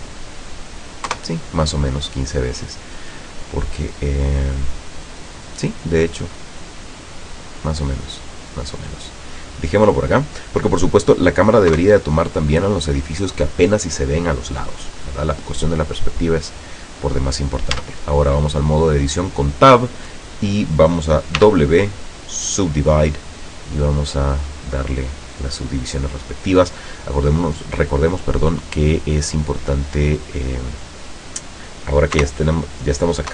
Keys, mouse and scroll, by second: 1.1 Return, 3.4-4.1 middle drag, 4.4-5.0 middle drag, 5.6-10.3 drag, 11.8 KP_0, 16.5 scroll down 2, 16.8-17.4 middle drag, 17.4 scroll down 2, 17.8 Tab, 18.2-18.6 scroll down 1, 21.5 w, 22.7 click, 24.1 click, 24.5 click, 26.0 click, 32.3 KP_0.